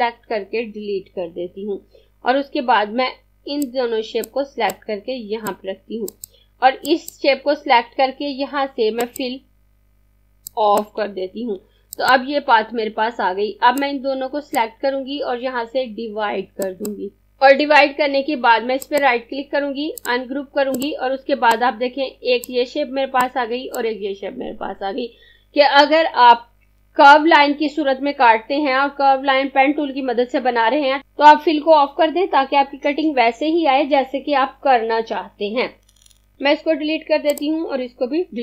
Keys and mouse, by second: 0.9 Delete, 3.1 click, 18.8 right click, 19.9 click, 36.3 click, 36.6 Delete, 37.3 click, 38.0 Delete.